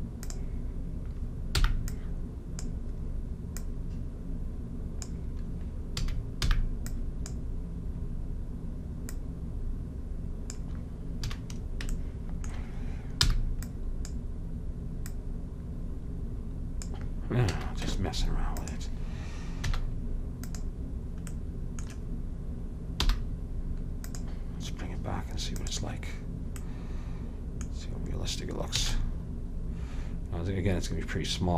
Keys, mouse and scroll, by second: 1.8 b, 3.7-5.5 drag, 6.1 a, 6.5 b, 9.2 click, 9.7-11.0 drag, 11.4 a, 13.4 b, 15.2-17.0 drag, 17.6 a, 18.0 Tab, 19.8 z, 23.3 m, 25.7-27.6 drag, 28.9 a.